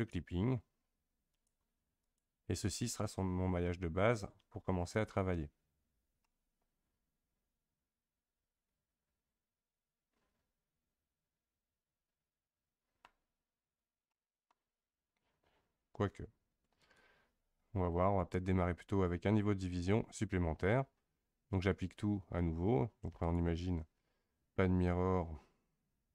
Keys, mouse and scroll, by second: 1.3-3.2 drag, 3.2-5.3 scroll up 2, 6.2-9.3 middle drag, 13.4-14.1 scroll down 2, 14.1-16.8 middle drag, 16.8-18.5 drag, 18.5-20.6 scroll up 1, 23.2-26.1 drag.